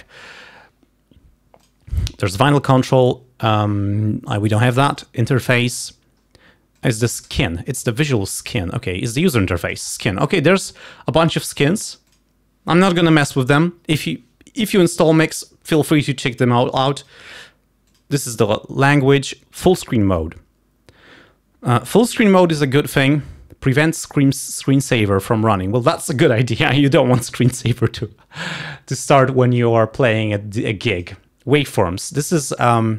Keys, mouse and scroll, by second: 1.7 click, 5.0 click, 6.8 click, 8.6 click, 9.9 click, 12.2 click, 17.0 click, 17.9 click, 24.1 click, 25.3 click, 31.0 click.